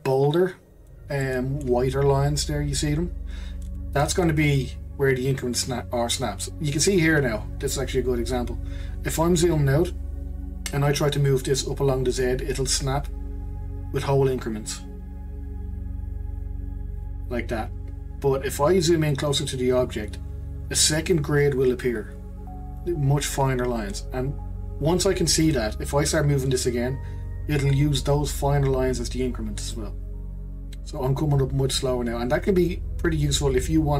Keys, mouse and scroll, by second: 1.2-4.2 shift+middle drag, 4.5 click, 8.6-11.6 scroll down 8, 11.6 click, 19.5-20.5 scroll up 3, 20.5-23.9 scroll up 5, 24.7-27.7 scroll up 1, 29.7 click.